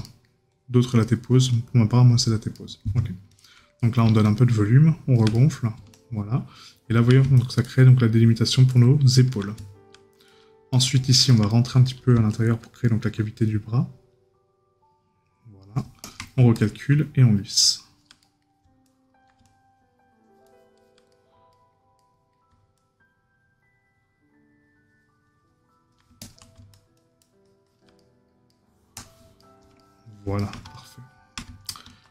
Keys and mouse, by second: 0.0 right click, 2.5 right click, 3.8 right click, 5.3 right click, 10.7 right click, 18.2 right click, 21.1 right click, 28.0 right click.